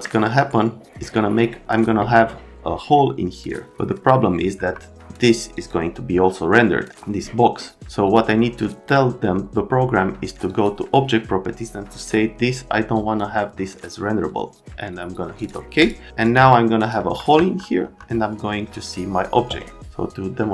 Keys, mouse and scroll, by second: 0.0 right click, 4.5 F3, 5.5 click, 10.5 click, 12.9 click, 15.4 click, 15.8 click, 16.2 click, 16.8 middle click, 17.3 F3, 17.8 F3.